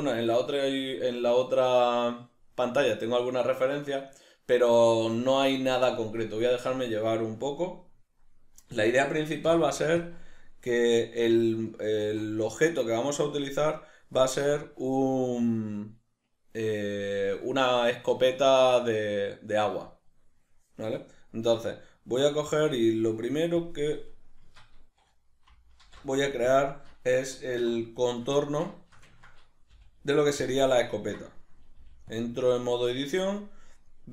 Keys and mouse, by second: 25.8 alt+m, 27.6 1, 28.1 right click, 28.4-32.2 ctrl+middle drag, 29.7 g, 30.5 click, 31.8 g, 32.2 click.